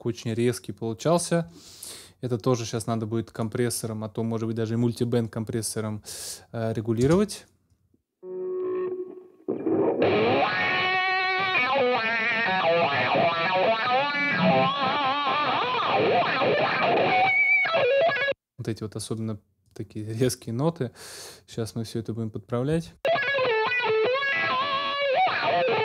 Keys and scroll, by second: 7.0 space, 18.0 space, 22.7 space.